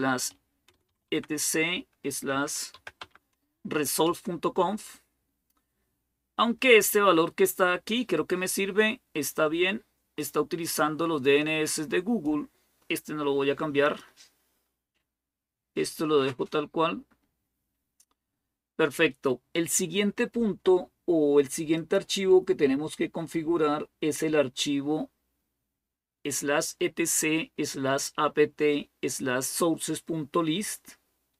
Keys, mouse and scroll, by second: 0.0-3.9 typing, 9.2 click, 11.0-12.1 drag, 13.6 click, 14.3-15.4 scroll down 2, 15.4-16.5 scroll down 1, 21.5 click, 22.2-30.0 scroll down 1, 30.0 scroll down 1.